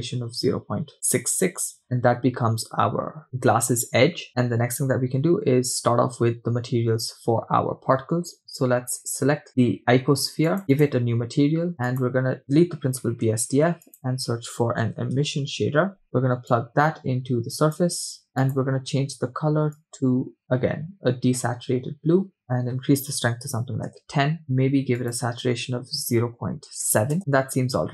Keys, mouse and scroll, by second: 5.1-5.7 scroll down 1, 5.7-7.1 scroll up 3, 10.5 click, 10.7 click, 11.7 middle click, 11.7 scroll down 3, 12.0 click, 12.4 click, 13.1 x, 13.5 shift+a, 16.5-18.3 drag, 18.4 click, 22.4-24.1 drag, 22.4 middle click, 27.2 scroll down 2.